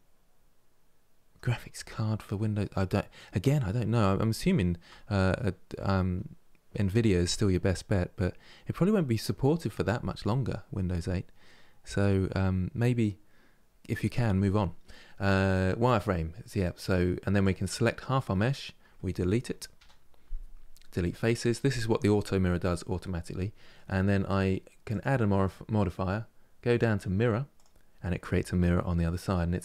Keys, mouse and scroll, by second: 16.1-17.1 middle drag, 17.1-19.4 drag, 19.4 Delete, 22.7-24.6 middle drag, 24.6 click, 27.3 click, 27.9-29.6 middle drag.